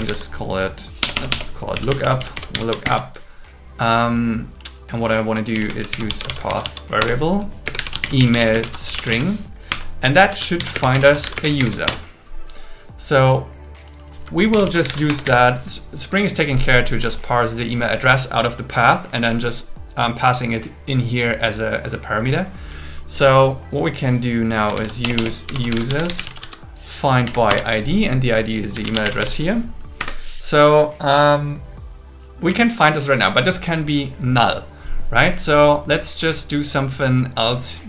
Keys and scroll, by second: 1.0 BackSpace, 2.8 shift+8, 5.6 alt+l, 5.7-9.3 typing, 7.0 Return, 9.7 Right, 10.6 shift+., 11.4 space, 11.6 alt+8, 11.9 Return, 14.5 shift+u, 15.1 Escape, 15.2 Down, 25.0 BackSpace, 27.3 Down, 27.5 Return, 30.0 Right.